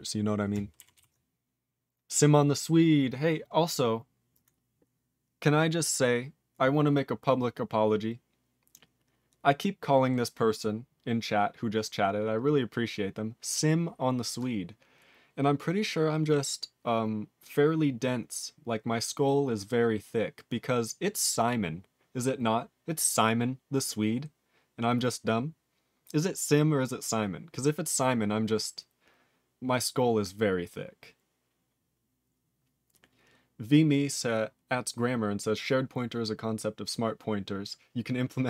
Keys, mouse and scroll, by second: 0.9 ctrl+s, 2.5 scroll down 2, 3.1-3.6 scroll up 5.